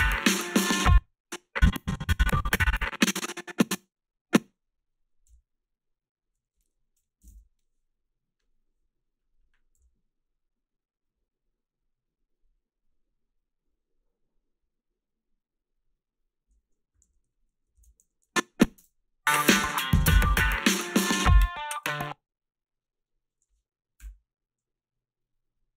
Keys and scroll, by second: 0.8 space, 5.3 g, 7.0 -, 7.2 1, 9.8 f, 17.0 i, 17.9 ctrl+r, 18.0 a, 18.8 space, 19.7 space, 21.8 space.